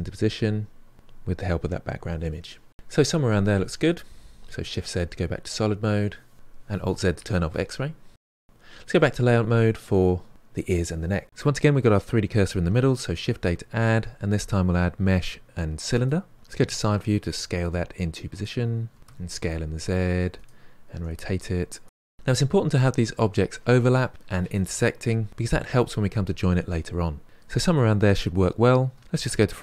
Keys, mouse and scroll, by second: 1.1 KP_3, 1.4-2.7 drag, 4.5 shift+z, 5.1-7.1 middle drag, 7.1 alt+z, 7.8 middle click, 8.4-10.0 ctrl+middle drag, 11.1-13.2 middle drag, 13.2 shift+a, 16.5 KP_3, 17.5 s, 18.9 r, 19.0 s, 20.2 r, 20.8 g, 28.9 KP_1.